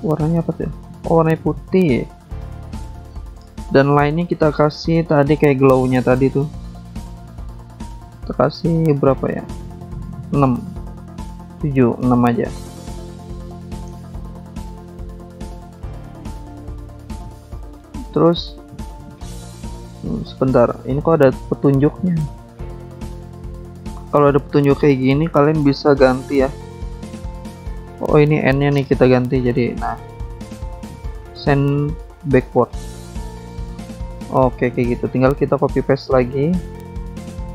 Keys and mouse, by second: 0.4 shift+click, 4.6 click, 4.8 click, 7.0 alt+Tab, 7.2 alt+Tab, 7.7 click, 7.7 click, 8.4 click, 8.5 click, 10.0 click, 10.2 click, 12.2 click, 13.3 click, 15.1 click, 15.2 click, 15.3 click, 15.3 double click, 15.4 double click, 15.5 double click, 15.6 double click, 15.7 double click, 17.1 click, 17.3 click, 17.9 click, 18.0 click, 20.1 click, 20.3 click, 21.5 shift+click, 25.7 click, 26.4 ctrl+z, 27.6 click, 27.7 click, 29.5 click, 32.0 click, 32.2 click, 32.7 click, 32.8 click, 33.6 click, 33.7 click, 35.1 click, 35.2 click, 37.0 click, 37.1 click, 37.2 double click, 37.3 double click, 37.3 double click.